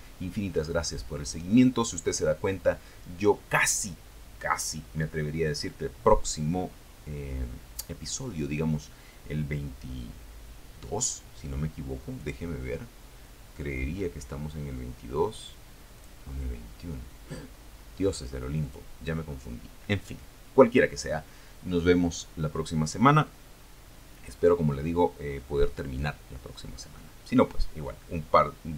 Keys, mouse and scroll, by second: 10.3 click, 14.1 click, 16.8 click.